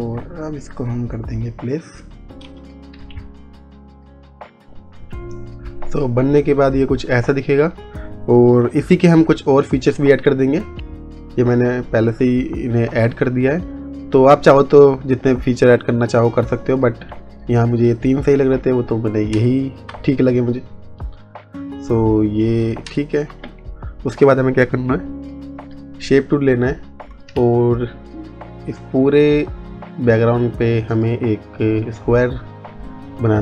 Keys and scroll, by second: 3.5 Return, 19.4 space, 22.9 space, 23.6 ctrl+z.